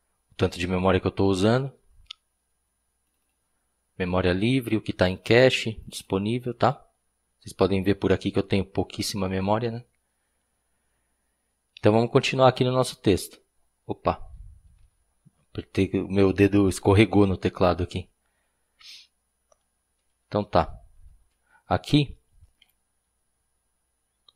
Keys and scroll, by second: 12.6 p, 14.8 u, 20.9 shift+], 22.6-23.1 typing.